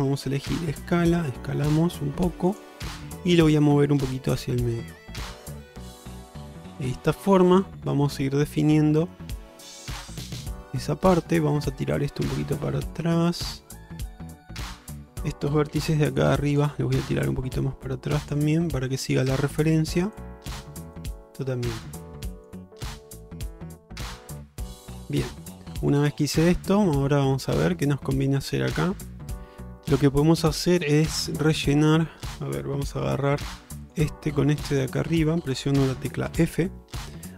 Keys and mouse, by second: 0.4 s, 3.7-7.0 drag, 7.3-8.1 middle drag, 9.1 alt+z, 11.7-14.8 drag, 15.8 1, 16.2 click, 17.1-18.4 drag, 18.7 shift+middle click, 19.5 shift+middle click, 20.3 click, 21.1 click, 22.2 click, 23.0 click, 24.0 middle click, 24.5 alt+z, 24.9 middle click, 25.3 shift+middle click, 25.7 middle click, 26.2 shift+middle click, 26.6 middle click, 28.5 shift+middle click, 33.1 2, 33.9 click, 34.8 shift+click, 36.4 f.